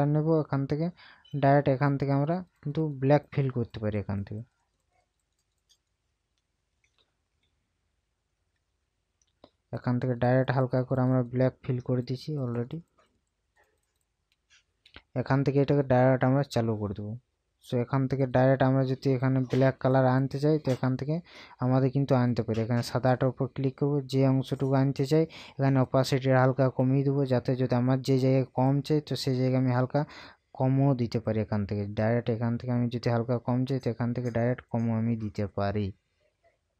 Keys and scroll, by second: 7.5 ctrl+z.